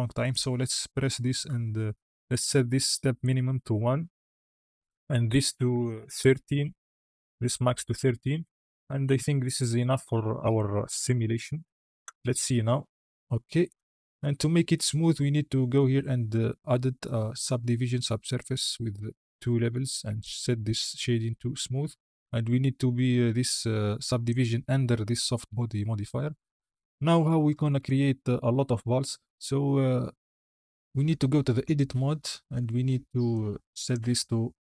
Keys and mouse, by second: 0.2-4.0 drag, 5.0-6.4 drag, 11.0 KP_Decimal, 11.9 space, 13.6 space, 15.6 click, 16.2-18.3 drag, 20.0-21.5 drag, 23.4-24.2 drag, 27.1 KP_1, 27.7 KP_Decimal, 31.5 Tab, 33.2-33.8 drag.